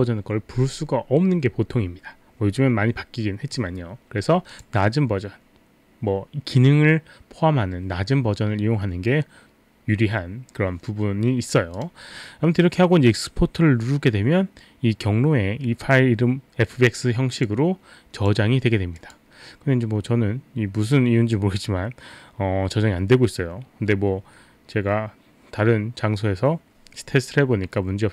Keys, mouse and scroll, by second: 4.5 click, 11.8 click, 17.4 click, 18.2 click, 19.0 click, 19.7 click.